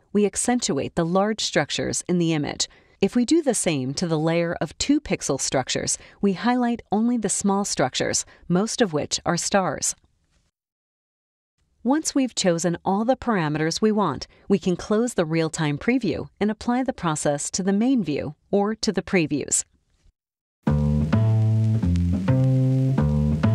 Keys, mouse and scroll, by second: 2.8 click, 4.8 click, 6.3-7.3 drag, 10.1 click, 14.8 click, 16.7 click, 17.4-19.9 drag.